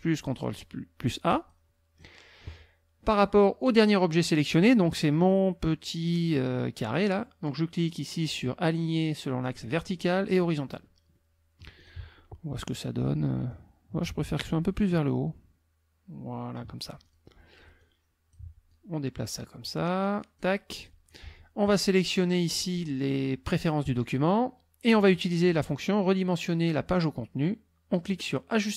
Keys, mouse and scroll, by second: 1.3 click, 9.5 click, 10.3 click, 11.1 middle click, 11.8 click, 13.5-16.7 drag, 17.0 ctrl+click, 17.8 click, 18.7-20.6 drag, 20.7 click, 21.1 click, 23.9 click, 25.5 click.